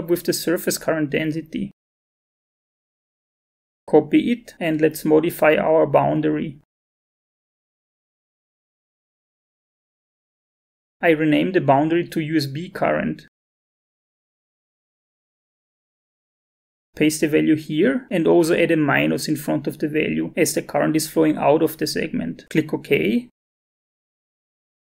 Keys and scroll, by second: 0.4 ctrl+c, 4.9 alt+Tab, 12.4-16.0 typing, 17.1 ctrl+v, 18.9 =.